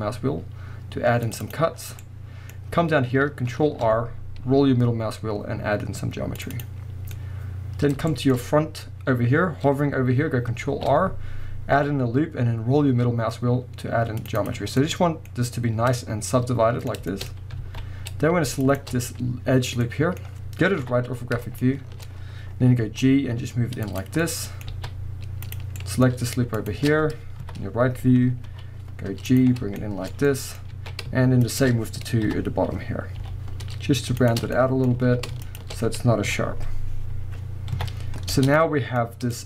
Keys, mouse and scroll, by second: 1.5 click, 1.8 scroll down 1, 2.0-6.6 middle drag, 2.5 scroll up 1, 3.6 ctrl+r, 6.6 click, 7.1-14.5 middle drag, 7.9 scroll down 1, 8.0-10.7 shift+scroll up 2, 10.7 ctrl+r, 14.5 click, 14.6 scroll down 1, 14.8-18.6 middle drag, 15.3-15.9 scroll up 1, 17.3-17.6 scroll up 1, 17.6 alt+a, 18.6 alt+shift+click, 19.9-24.0 middle drag, 20.8 KP_3, 22.1-22.8 scroll up 2, 22.8 g, 24.0 click, 24.3-25.5 middle drag, 24.7 alt+a, 25.5 click, 25.8-26.6 middle drag, 26.6 ctrl+shift+click, 27.4 KP_3, 28.0-28.5 scroll up 1, 28.5 g, 29.4 click, 29.5-29.8 scroll down 1, 29.8-31.4 shift+middle drag, 30.6 scroll up 1, 30.8 alt+a, 31.4 alt+shift+click, 32.3 KP_3, 32.9-33.2 scroll up 1, 33.2 g, 34.3 shift+click, 34.5-35.5 middle drag, 35.0 alt+a, 35.5 alt+shift+click, 36.2 KP_1, 37.8 KP_3, 38.1 scroll down 1, 38.3 Tab, 38.6-39.4 middle drag.